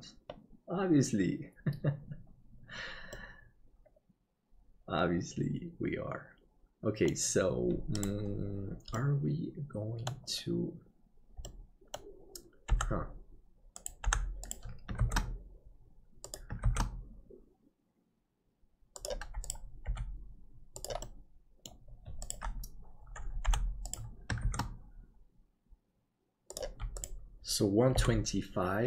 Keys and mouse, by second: 3.2-7.5 middle drag, 8.9-10.1 middle drag, 11.4 middle click, 12.8 Delete, 14.1 Delete, 15.0 shift+d, 19.8 g, 21.1 middle click, 23.3 Delete, 23.4 Delete, 24.4 shift+d, 27.9 g.